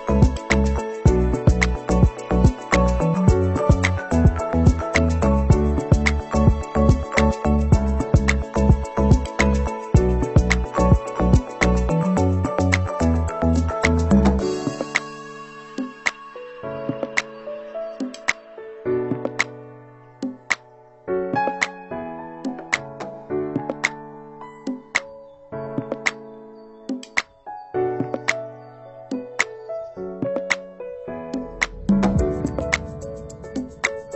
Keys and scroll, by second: 0.1 ctrl+-, 7.3 ctrl+c, 7.6 ctrl+v, 14.9 ctrl+=, 30.8 ctrl+-.